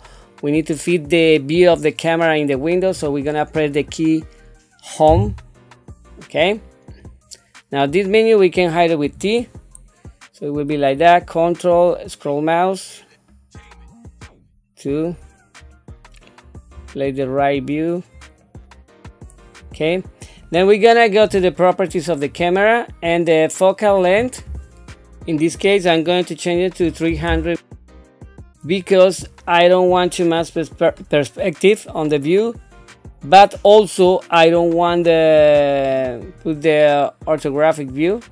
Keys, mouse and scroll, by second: 9.0 t, 18.4 middle click, 25.7-28.5 drag, 36.5-38.3 drag.